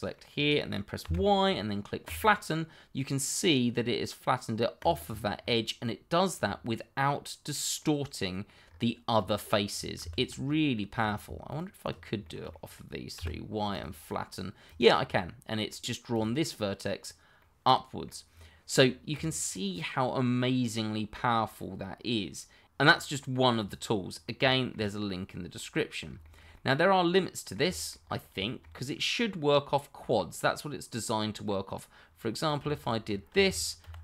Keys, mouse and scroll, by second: 1.0 y, 2.0 click, 4.8 click, 5.0 scroll down 1, 5.4 middle click, 6.3-6.7 scroll down 1, 6.7 middle click, 8.6-9.1 scroll up 1, 10.0 ctrl+z, 10.4 middle click, 11.0 click, 11.5 shift+click, 12.2 middle click, 13.1 y, 13.7 click, 15.1 middle click, 16.1 click, 17.0-17.4 scroll down 1, 17.4 middle click, 18.3-18.8 scroll down 1, 19.1 click, 19.5 middle click, 24.1-24.6 scroll up 1, 24.6 scroll down 1, 24.8 middle click, 25.2 shift+middle click, 25.9 middle click, 28.0-28.4 scroll up 1, 28.4 shift+middle click, 28.9 middle click, 32.4 click, 33.8 shift+1.